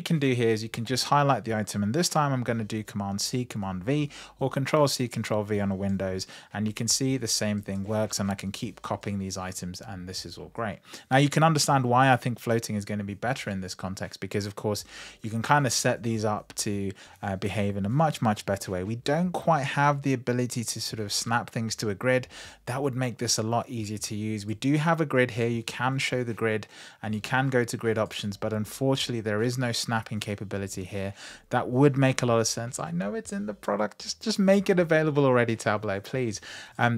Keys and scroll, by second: 5.7 super+c, 6.2 super+v.